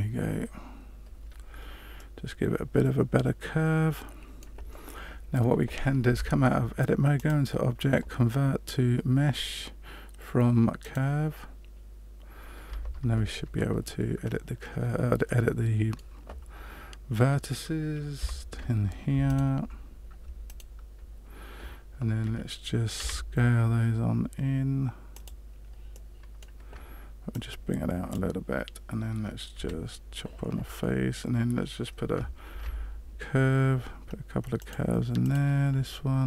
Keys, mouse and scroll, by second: 1.9 middle click, 6.0 Tab, 7.1 click, 12.7 Tab, 14.2-14.6 scroll up 4, 15.2 middle click, 18.1 1, 19.2 alt+right click, 20.5 alt+right click, 22.9 s, 25.9 middle click, 27.3 click, 29.5 f, 32.4 ctrl+r.